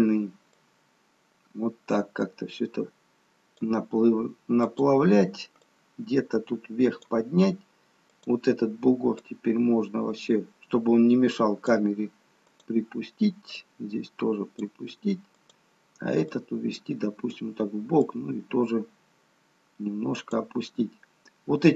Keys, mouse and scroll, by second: 0.7 click, 4.7 click, 6.1 click, 9.4 click, 12.5 click, 13.7 click, 16.6 click, 18.2 click.